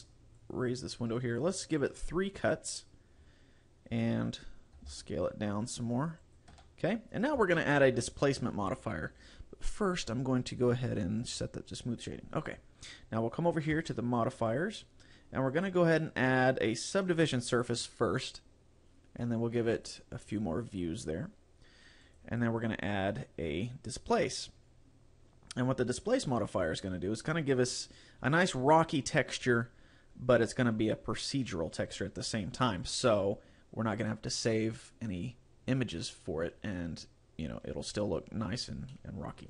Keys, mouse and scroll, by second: 0.4 click, 1.8 click, 2.4 click, 5.0 s, 6.4 click, 6.6 Tab, 6.9-7.4 scroll up 6, 7.6 shift+middle click, 9.4 click, 11.3 click, 12.6-13.0 scroll up 3, 13.8 click, 14.5 click, 15.6 click, 19.8 click, 20.3 click, 22.2 click, 27.3 click, 39.0 middle click.